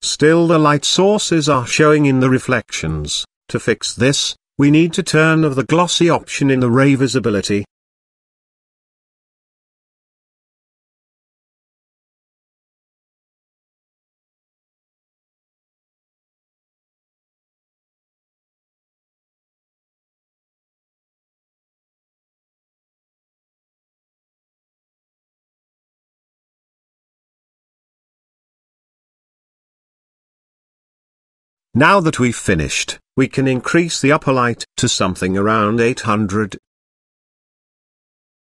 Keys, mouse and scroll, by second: 6.2 click, 8.0 click, 9.3 click, 11.2 click, 13.6 click, 18.2 click, 19.6 click, 20.9 click, 21.9 click, 24.0 click, 25.1 click, 26.4 click, 27.7 click, 32.1 click, 34.5 click, 35.6-38.4 drag, 37.0 KP_0.